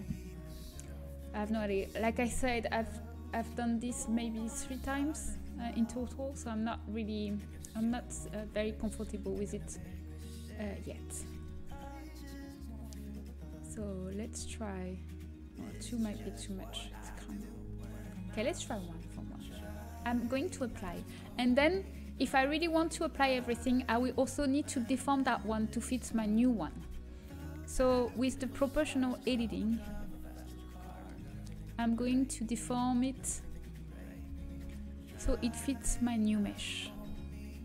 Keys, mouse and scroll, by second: 0.0 Tab, 0.5 Tab, 12.9-14.1 right drag, 16.8-18.6 middle drag, 18.6-19.8 right drag, 20.2-21.7 middle drag, 25.9 middle click, 26.6 Tab, 27.8 KP_7, 29.6-30.9 drag, 30.9-32.9 middle drag, 32.9-34.2 right drag, 34.2 KP_3, 34.6 z, 36.4 g.